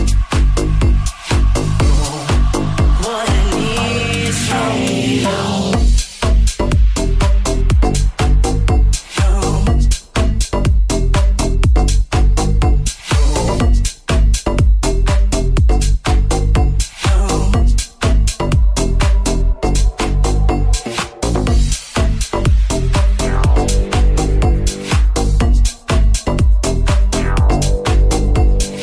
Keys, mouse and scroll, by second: 2.2-15.8 middle drag, 15.9-28.8 middle drag.